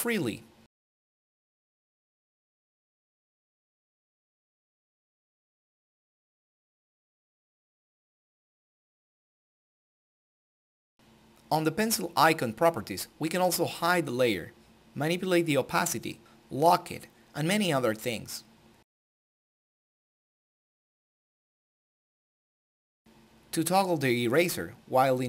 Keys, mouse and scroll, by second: 1.3 right click, 1.5 click, 2.1 scroll up 1, 3.1-7.3 drag, 8.1 click, 11.3-23.9 drag.